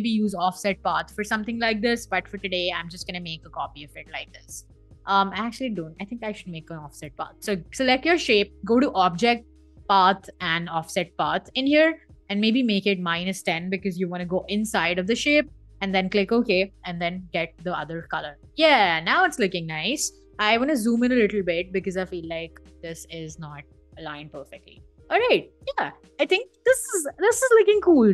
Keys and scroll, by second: 1.5 i, 2.3 v, 5.9 BackSpace, 13.5 Left, 13.9 -, 16.3 i, 17.1 v, 17.7 v.